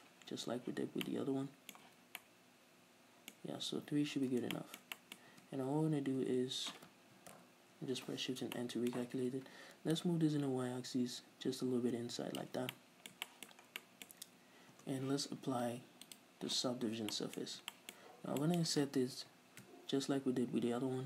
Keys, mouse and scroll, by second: 0.8 z, 1.2-5.5 middle drag, 2.0 z, 4.4 z, 5.5 Tab, 6.1-6.4 scroll up 2, 6.4 a, 7.5 shift+n, 8.7-10.1 middle drag, 10.1-12.9 drag, 12.7 scroll down 2, 12.9 middle click, 13.8 scroll down 1, 14.3 scroll up 1, 14.9 Tab, 16.2 middle click, 16.2 click, 16.9 Tab, 17.3 middle click, 17.6-18.6 scroll up 4, 18.3-19.3 middle drag.